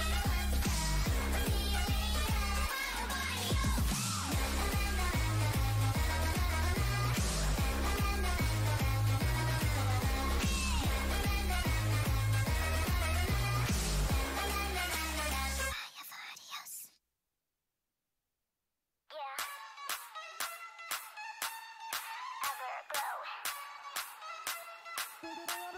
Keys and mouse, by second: 0.0 z, 1.0 c, 3.0-4.9 drag, 3.2 g, 4.5 o, 4.9 g, 11.6 s, 13.2 z, 16.3 KP_7, 17.1-19.3 drag, 17.8 g, 22.1 right click, 22.8 click, 22.8 g, 23.0-24.1 right drag, 24.8-25.7 right drag, 25.1 g.